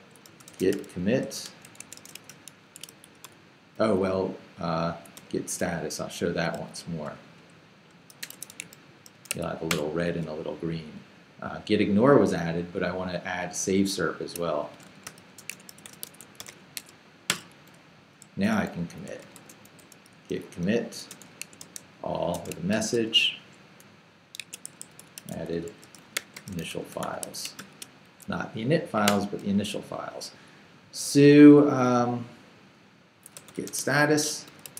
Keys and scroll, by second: 0.0-3.7 typing, 5.2 g, 5.5 BackSpace, 6.6-9.8 typing, 14.8-16.4 typing, 16.8 Tab, 17.3 Return, 18.8-22.7 typing, 24.1-28.1 typing, 29.1 Return, 33.1-34.7 typing.